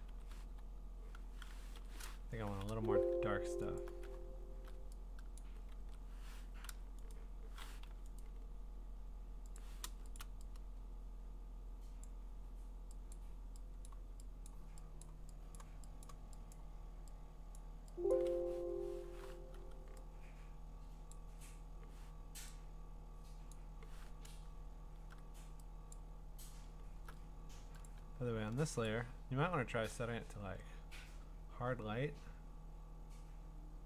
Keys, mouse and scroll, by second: 0.0-2.7 typing, 3.8 alt+click, 4.3-4.7 scroll down 7, 5.4 click, 5.4 scroll, 5.8 ctrl+z, 6.6 u, 7.1 right click, 7.8 Escape, 8.2 right click, 9.6 click, 10.2 click, 13.9 click, 14.5 click, 15.0 click, 15.6 click, 16.0 click, 16.5 click, 17.6 click, 18.1 click, 18.4 Escape, 19.6 6, 21.1 click, 23.5 click, 24.3-25.1 scroll, 25.9 click, 26.7 scroll, 27.9 click, 28.9 click.